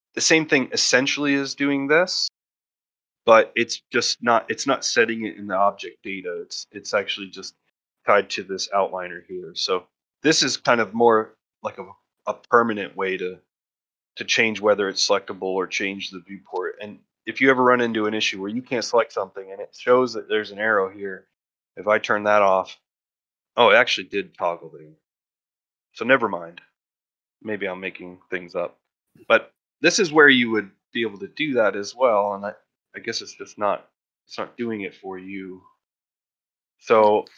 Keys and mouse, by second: 0.2 click, 10.1 click, 11.4 click, 11.6 click, 12.0 click, 12.2 click, 13.1 click, 14.0 click, 14.4 click, 15.4 click, 21.8 click, 24.6 click, 30.5 click, 30.8 click, 31.3 click.